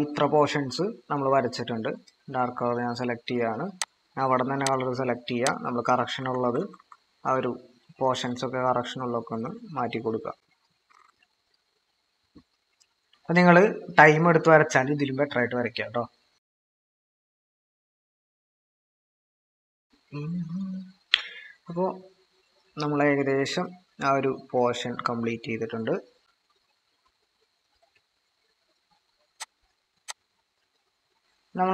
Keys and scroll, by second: 6.2-6.8 typing, 10.9 typing, 18.3 typing, 29.6 ctrl+=.